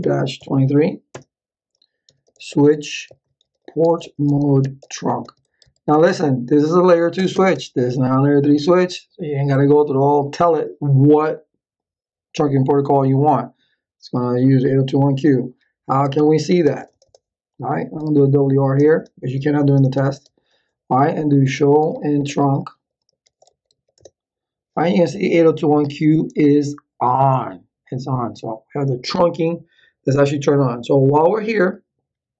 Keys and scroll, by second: 0.0-6.1 typing, 7.2 Return, 16.2 ctrl+z, 16.6 Return, 17.9-18.9 typing, 21.1-24.3 typing.